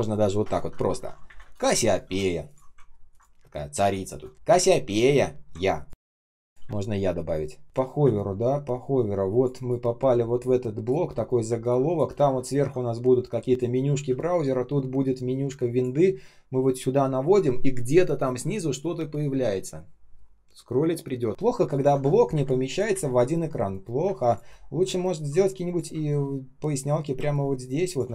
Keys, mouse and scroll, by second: 0.0-2.0 typing, 1.2 ctrl+alt+-, 1.2 Delete, 2.7 ctrl+scroll down 1, 3.0 ctrl+click, 3.3 space, 3.8 space, 4.3 space, 5.8 ctrl+click, 5.9 ctrl+click, 6.6-8.5 typing, 12.1 typing, 21.3 ctrl+scroll down 1, 21.6 ctrl+click, 22.2 Delete, 22.8 Delete, 23.6 shift+0, 23.9 space, 24.7 k, 26.0 alt+click, 27.2 alt+click.